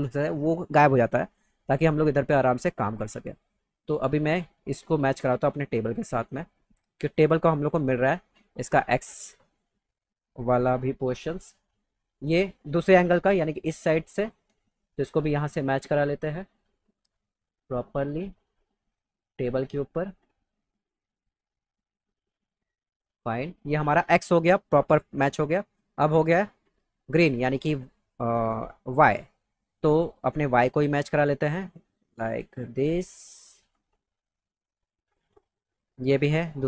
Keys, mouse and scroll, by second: 3.1 click, 4.7-5.8 drag, 6.9 click, 9.5-10.6 drag, 12.1 click, 14.2-15.9 drag, 16.8 click, 18.8 click, 20.0-21.2 drag, 22.2-23.8 drag, 30.1-30.5 drag, 31.0-32.5 drag, 33.5-35.1 drag, 36.4 click.